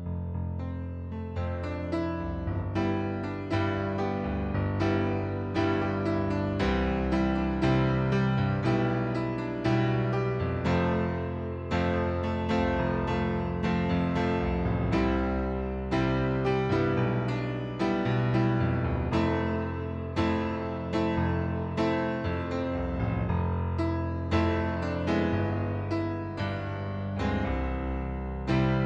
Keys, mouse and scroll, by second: 1.9 click, 2.8 click, 3.6 click, 4.7 click, 7.0 click, 9.0 click, 9.8 click, 10.4 right click, 12.0 click, 13.6 middle click, 14.3 click, 15.1 click, 15.9 click, 16.6 click, 17.4 click, 20.7 click, 21.5 click, 22.1 right click, 23.1 click, 24.0 middle click, 25.5 click, 26.3 click, 27.5 click, 28.3 KP_3, 28.5 Return.